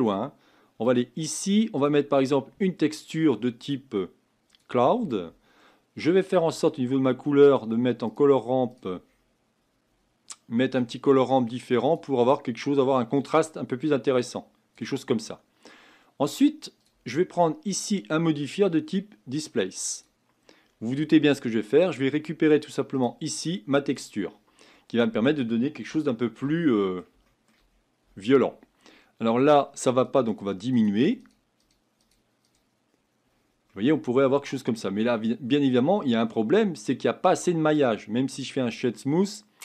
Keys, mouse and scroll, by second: 10.8-24.7 drag, 24.7-27.7 middle drag, 27.7 scroll up 2, 29.8-33.7 drag, 33.7-34.9 middle drag, 34.9 scroll up 4, 35.7-36.2 scroll down 2, 36.2-38.4 middle drag, 38.4 right click, 38.9-39.6 middle drag.